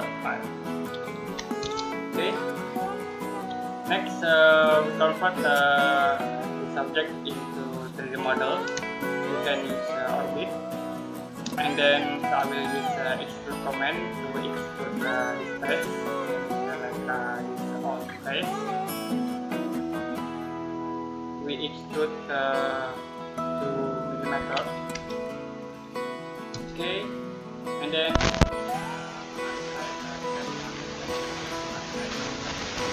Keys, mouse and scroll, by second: 1.0 5, 1.4 Return, 1.9 scroll down 1, 2.1-2.5 scroll up 1, 3.7 middle click, 8.7 shift+middle click, 13.6 click, 14.3 scroll down 1, 15.2 click, 24.7 2, 26.3 Return, 27.3 middle click, 29.4 click, 32.8 shift+middle click.